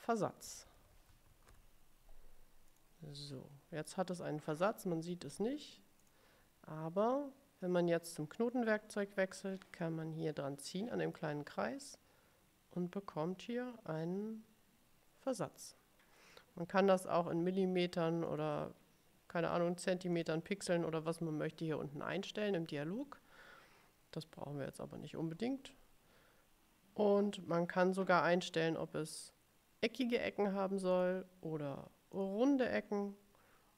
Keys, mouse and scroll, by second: 0.3-2.1 typing, 2.8 click, 6.2 click, 9.9-15.9 drag, 18.4 click, 20.2 click, 31.1 click, 32.2 click.